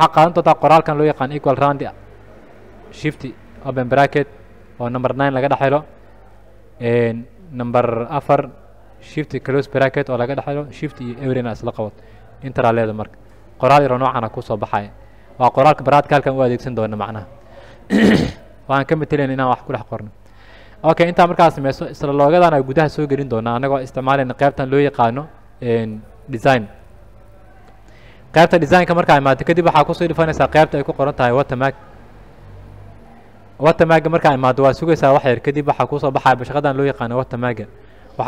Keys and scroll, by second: 0.4-2.4 typing, 3.9 shift+9, 8.4 KP_4, 9.8 shift+0, 12.6 Return.